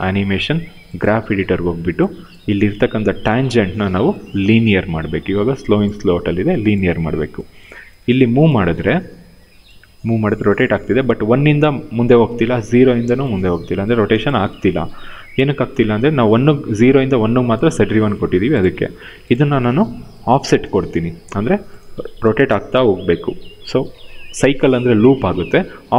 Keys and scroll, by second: 3.0 f, 8.3 w, 14.0 0, 14.2 Return.